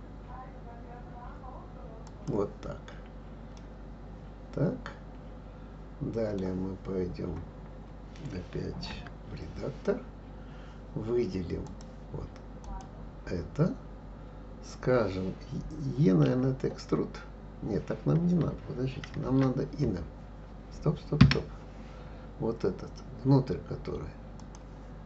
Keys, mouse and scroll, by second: 3.6-6.6 middle drag, 7.0-7.5 scroll up 2, 7.5 scroll down 1, 8.9 Tab, 11.6 click, 12.6 click, 16.2 e, 24.4 click.